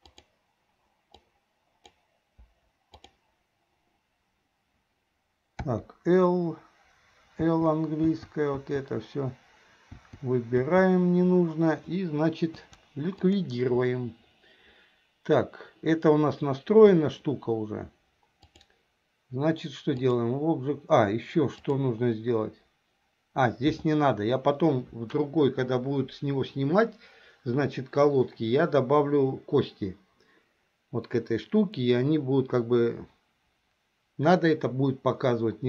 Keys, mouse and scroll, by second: 1.3 click, 2.6 Delete, 5.7 l, 7.5 l, 8.1 l, 8.8 l, 10.2 l, 10.7 l, 13.1 Delete, 16.9 KP_1, 18.5-20.3 drag, 21.7-24.0 drag.